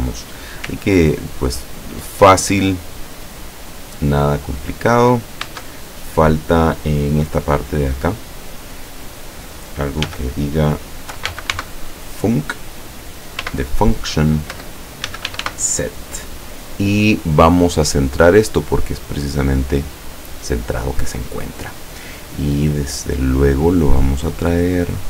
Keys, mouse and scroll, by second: 0.8-1.8 ctrl+scroll up 4, 2.6 middle click, 2.9 middle click, 3.6 middle click, 4.6 click, 5.5 Caps_Lock, 8.6 click, 10.1-12.1 typing, 13.5 ., 14.6 Return, 14.9-16.0 typing, 20.2 click, 23.2 click.